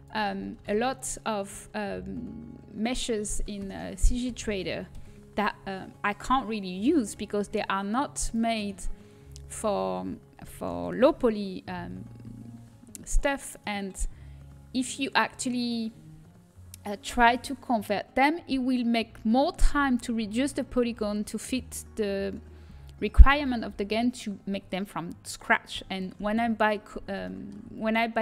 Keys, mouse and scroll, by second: 0.5 shift+d, 3.5 r, 4.9 KP_1, 10.5 s, 27.2 click.